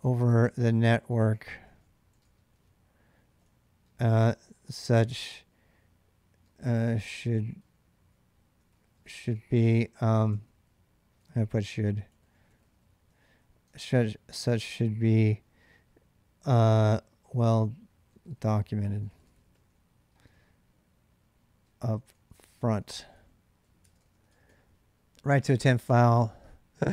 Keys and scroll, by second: 0.0-4.6 typing, 6.3-13.8 typing, 17.1-24.8 typing, 21.5 Return.